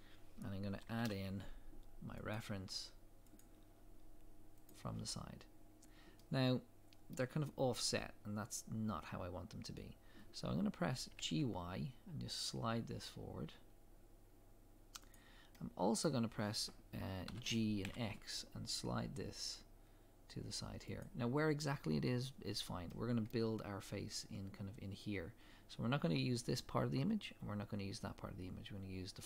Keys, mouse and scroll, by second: 4.7-6.1 drag, 6.2-21.4 middle drag, 11.1 g, 17.3 g, 21.4 click, 22.9-24.1 middle drag.